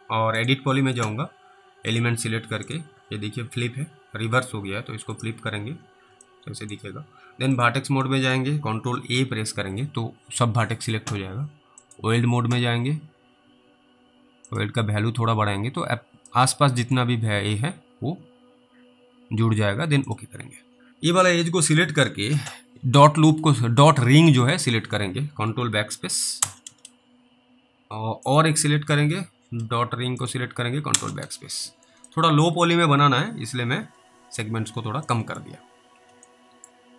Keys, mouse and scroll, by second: 0.4 click, 5.8-6.1 scroll up 1, 6.6 alt+middle click, 7.6 click, 8.4 middle click, 8.9 ctrl+a, 11.9 click, 12.8-13.3 scroll up 3, 14.5 click, 16.6 middle click, 20.1 click, 20.6 scroll down 2, 20.9 scroll up 3, 21.7 click, 26.4 ctrl+BackSpace, 28.3 click, 30.2 click, 30.9 ctrl+BackSpace, 31.5-31.9 scroll down 3, 32.3 alt+middle click, 35.5 middle click, 36.5 alt+middle click.